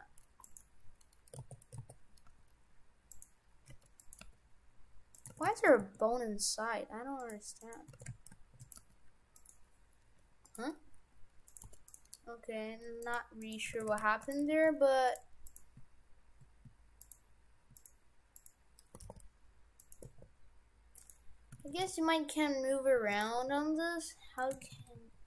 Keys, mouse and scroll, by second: 1.4 ctrl+z, 1.8 ctrl+z, 2.3 g, 3.7 Tab, 4.0 right click, 4.3 g, 5.3 shift+f, 7.6 right click, 8.1 shift+f, 8.8 g, 10.1 Delete, 11.6 right click, 11.8 g, 13.2 right click, 13.4 right click, 13.9 shift+f, 14.5 ctrl+Tab, 15.5 right click, 17.1 shift+right click, 17.8 right click, 18.5 right click, 18.5 shift+right click, 18.9 r, 20.1 r, 21.6 shift+f, 23.4 r, 24.6 shift+f.